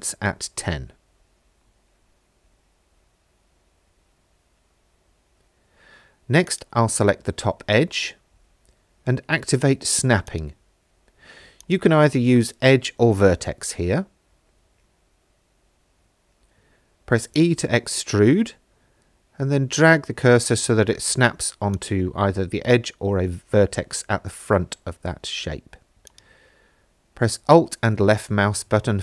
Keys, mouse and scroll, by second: 3.3 middle click, 4.8 shift+middle click, 6.5 click, 10.3 click, 11.6-15.8 drag, 17.7 e, 18.9 y, 21.8 click, 26.1 alt+click, 27.4 f.